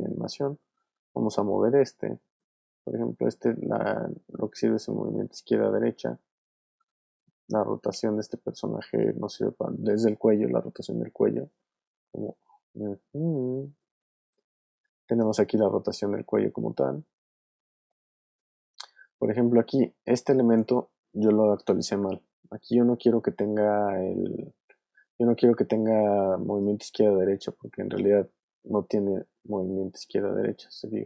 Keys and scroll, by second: 1.0 v, 2.9 super+z, 6.1 super+z, 6.7 super+w, 7.4 w, 8.3 super+z, 14.1 super+z, 18.7 super+z, 28.8 v, 30.4 super+z.